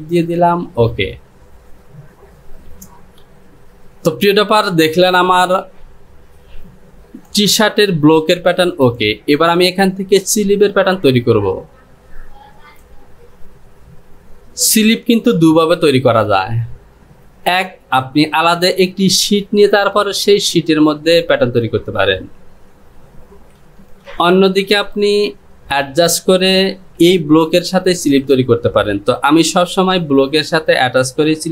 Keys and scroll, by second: 27.2 j.